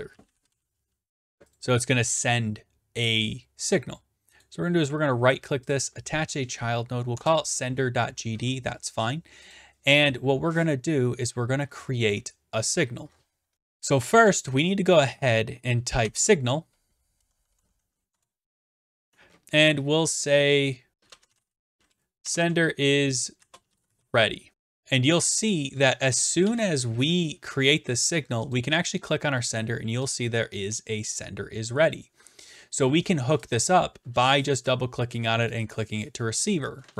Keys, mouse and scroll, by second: 0.0-1.0 typing, 1.6 click, 4.4-5.5 right drag, 5.7-6.8 drag, 7.1 Return, 9.5 click, 11.6-13.1 scroll, 13.1-13.5 scroll, 13.5 click, 14.3 click, 15.8-17.8 typing, 18.1 Return, 20.9-22.2 typing, 23.5-24.5 typing, 24.5-25.2 scroll down 11, 26.3 click, 26.5 ctrl+s, 27.4 click, 28.5 click, 30.1 click, 34.4 click, 34.5 click.